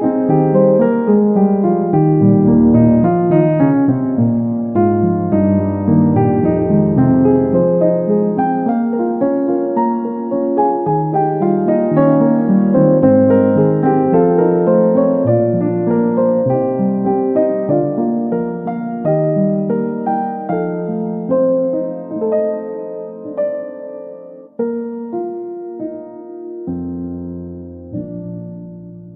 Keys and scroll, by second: 16.3 Return.